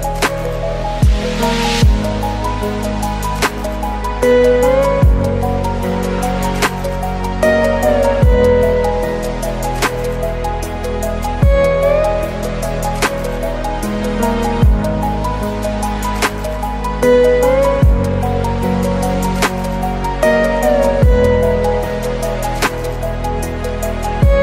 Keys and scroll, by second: 2.6 ctrl+alt+space, 10.9 ctrl+t, 11.2 ctrl+space, 20.5 ctrl+space, 24.0 ctrl+space.